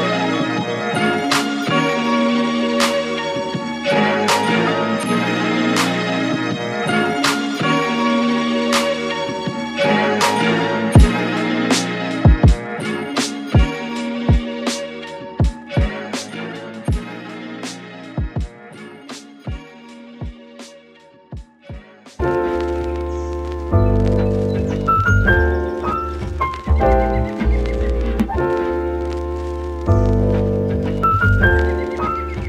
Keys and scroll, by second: 16.7-18.0 typing.